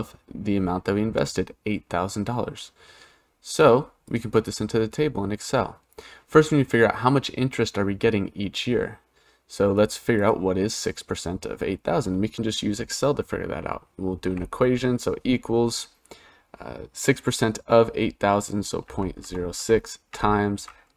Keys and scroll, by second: 14.0 =.